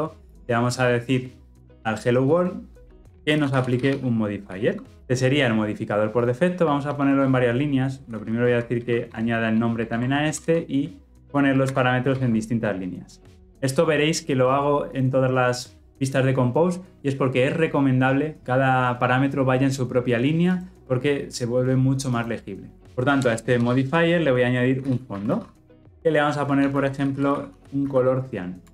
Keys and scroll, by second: 5.0 Escape, 6.8 alt+Return, 11.7 ctrl+alt+l, 12.0 ctrl+alt+o, 25.8 Return.